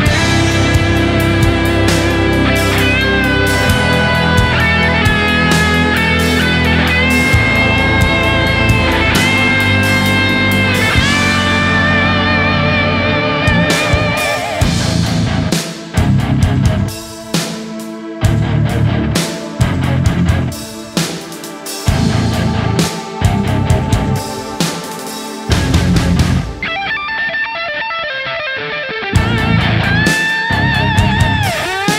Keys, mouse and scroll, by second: 0.0-0.3 typing, 1.4 right click, 3.4 s, 4.5-5.2 typing, 6.3 right click, 6.6 s, 6.8 right click, 6.9 s, 10.8 s, 12.2 right click, 13.1 double click, 13.9 right click, 14.7 alt+click, 16.0 alt+right click, 16.7 alt+right click, 17.1 alt+click, 17.3-20.3 typing, 20.3 alt+right click, 20.9 alt+click, 22.7 typing, 24.1 alt+click, 24.2 typing, 26.2 w, 26.3 alt+click, 27.7 alt+click, 28.7 ctrl+z, 29.8 ctrl+z, 30.1 x, 31.6 x, 31.7 alt+click.